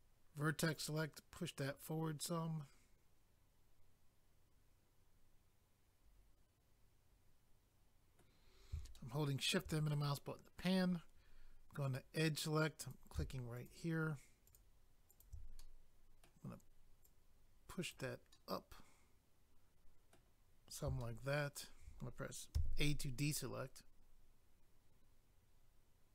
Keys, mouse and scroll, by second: 0.8 click, 2.2 middle click, 8.9 shift+middle click, 9.9 middle click, 11.8 click, 12.0 click, 12.8 click, 12.9 click, 13.6 shift+click, 13.7 shift+click, 14.4 shift+click, 14.5 shift+click, 15.1 shift+click, 15.2 shift+click, 15.6 middle click, 17.0 click, 18.3 middle click, 21.0 shift+middle click, 22.5 a.